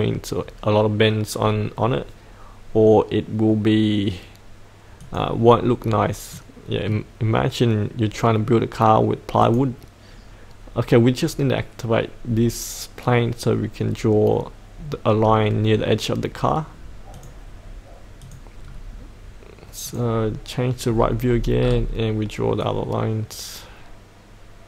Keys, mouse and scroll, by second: 1.7-5.0 scroll down 1, 5.0 click, 5.7-6.0 scroll up 1, 6.3-7.8 middle drag, 9.4 click, 18.6-19.8 scroll down 1, 19.8 click, 20.9-21.3 scroll down 1, 21.7-22.6 scroll down 1, 22.6-24.6 drag.